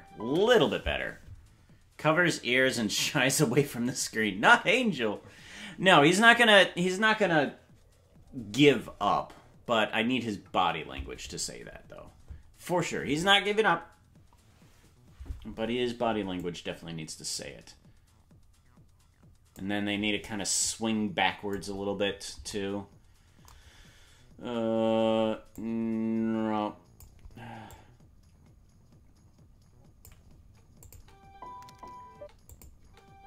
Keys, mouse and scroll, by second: 16.4 click, 20.6 click, 25.6 click, 27.7 click, 30.8 click, 30.9 space, 32.1 space, 32.5 click, 32.8 space.